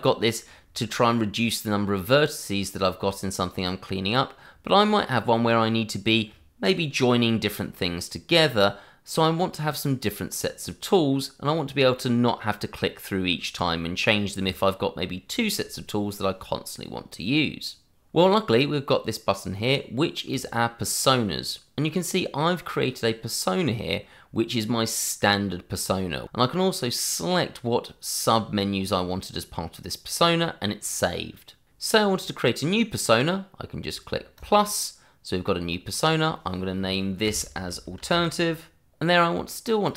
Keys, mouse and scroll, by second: 20.3 click, 34.3 click, 35.8 double click, 37.1-38.9 typing, 39.2 click, 39.6 double click.